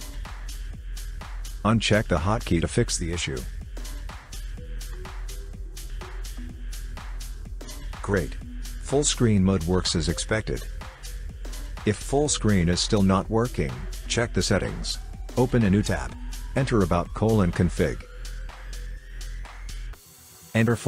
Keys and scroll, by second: 6.8 F11, 13.7-14.1 typing.